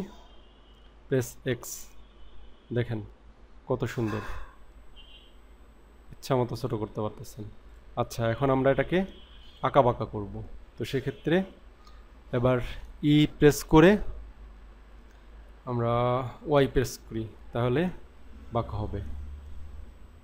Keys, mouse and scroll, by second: 1.5 x, 7.7 click, 8.7 middle click, 9.8-10.8 scroll down 2, 13.5 e.